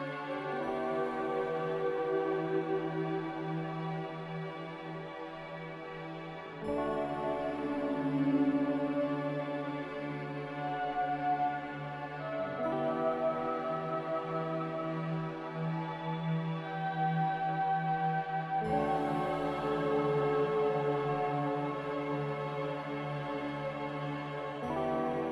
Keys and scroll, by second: 2.8 ctrl+z, 6.1 Delete, 6.1 z, 6.6 m, 19.1 z.